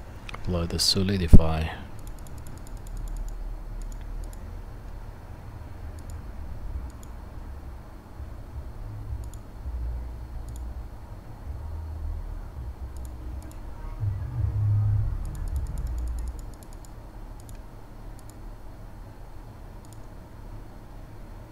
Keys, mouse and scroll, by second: 10.6-12.9 middle drag, 12.9-21.5 drag.